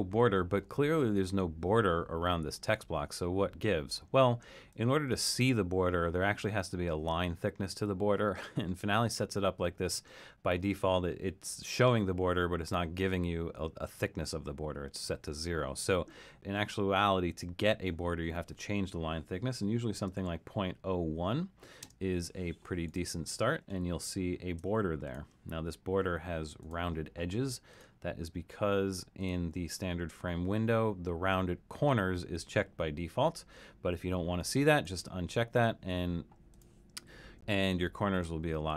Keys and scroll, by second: 19.4-20.7 typing, 23.9 super+=, 24.4 super+=.